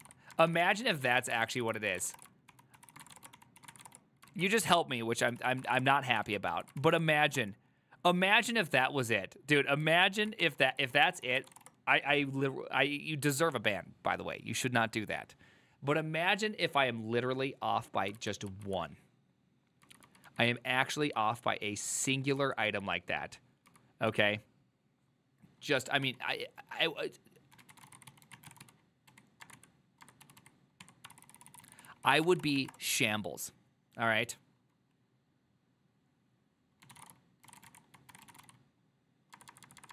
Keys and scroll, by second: 0.0-3.9 typing, 2.8 ctrl+c, 4.0 Return, 4.4 ctrl+a, 5.5 ctrl+c, 5.5-6.6 typing, 6.3 ctrl+a, 6.9 ctrl+c, 7.1 Up, 7.5 Return, 10.3 ctrl+a, 10.5-12.1 typing, 10.8 ctrl+c, 10.9 ctrl+c, 11.1 ctrl+c, 18.6 ctrl+u, 19.9-24.7 typing, 26.1 typing, 27.6-33.2 typing, 37.5-39.9 typing.